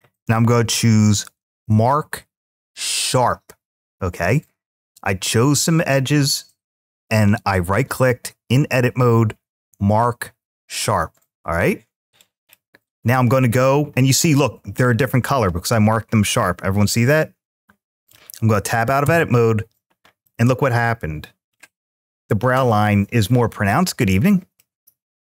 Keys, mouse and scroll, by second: 14.8-17.9 middle drag, 18.8 Tab, 20.0 scroll up 1, 20.1-21.0 middle drag, 21.4-21.8 scroll down 2, 22.0-22.5 middle drag, 24.3-25.2 middle drag.